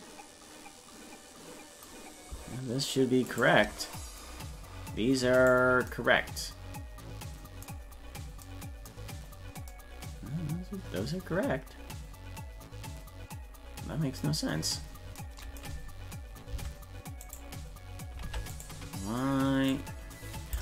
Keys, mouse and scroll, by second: 3.4 shift+right click, 5.4 right click, 9.2-9.6 scroll up 4, 14.5-15.1 scroll down 5, 16.5 Tab, 17.3 right click, 18.3 ctrl+Tab, 18.6 right click, 19.7 click.